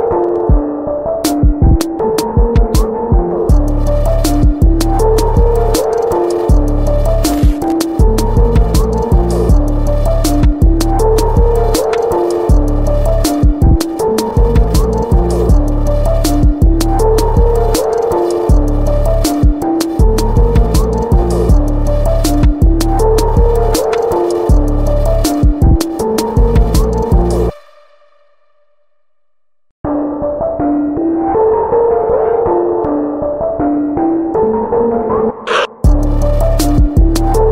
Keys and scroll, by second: 0.9 ], 8.3 ], 9.5 x, 24.6 space.